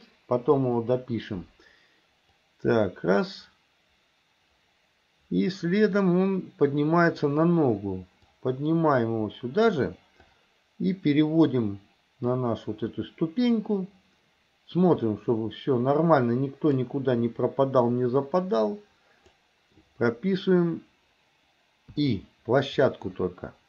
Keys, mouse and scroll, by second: 0.7 Delete, 2.4-7.3 drag, 8.5-9.8 drag, 10.3-11.6 drag, 12.4-16.9 drag, 18.6 click, 23.0-23.6 middle drag.